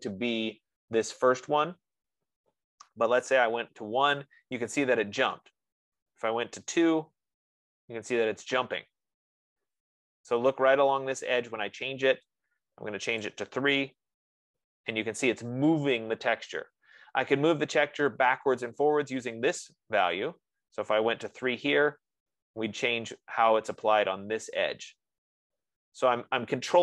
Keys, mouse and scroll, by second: 1.8 click, 3.3-4.2 typing, 5.7-6.9 BackSpace, 14.2-17.1 drag, 14.2 3, 17.0 F15, 20.5-25.6 drag, 21.8 3, 22.0 Tab.